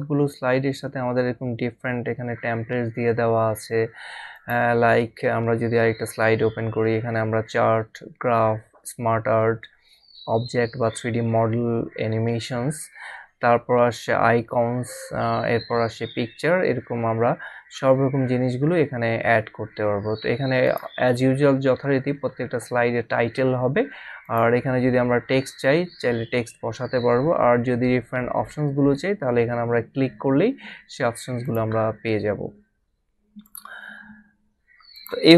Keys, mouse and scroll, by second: 4.3 click, 20.7 click, 24.2 click, 31.4 click, 33.4 click, 34.9 click.